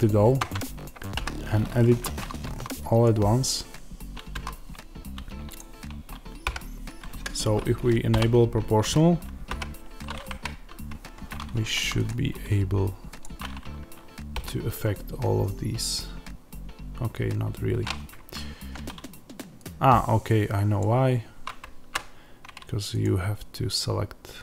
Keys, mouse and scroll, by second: 0.3 Tab, 1.0 a, 1.8 1, 2.4 a, 2.9 click, 4.2 a, 5.5 click, 6.4 g, 7.1 Escape, 8.0 o, 10.9 Escape, 13.0-20.7 drag, 14.3 g, 18.2 Escape, 21.9 z, 22.9 click.